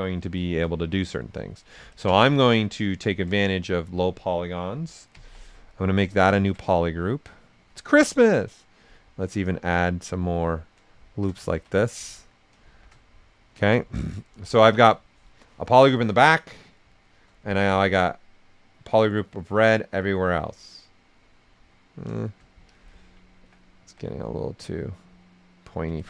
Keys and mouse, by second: 0.1 shift+f, 0.4 right click, 1.9 ctrl+shift+click, 3.4 shift+right click, 5.1 ctrl+w, 6.3 ctrl+shift+click, 6.6 shift+right click, 8.5 click, 9.5 click, 10.6 right click, 11.1 shift+f, 11.4 ctrl+right click, 11.7 right click, 12.7 shift+f, 13.0-16.7 right drag, 17.8-20.8 drag, 20.8 right click, 22.6 ctrl+click, 23.7 w, 24.4-26.0 drag.